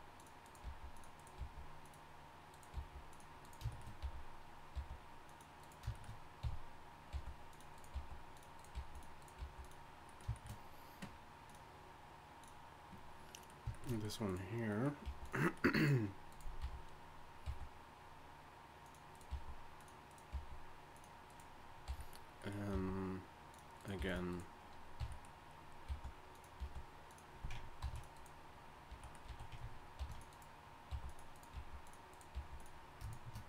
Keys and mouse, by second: 0.1 click, 0.6 g, 1.4 g, 2.7 g, 4.0 f, 4.7 g, 6.4-9.4 typing, 9.9-12.6 drag, 13.3 middle click, 14.2 click, 14.8 right click, 15.0 g, 15.5 click, 16.6 f, 17.4 g, 19.3 g, 20.3 g, 21.9 f, 22.7 g, 24.0 g, 25.0 f, 25.9 g, 26.6 g, 27.8 ctrl+t, 28.9 z, 29.3 z, 30.0 ctrl+r, 30.9 g, 31.5 g, 32.3 g.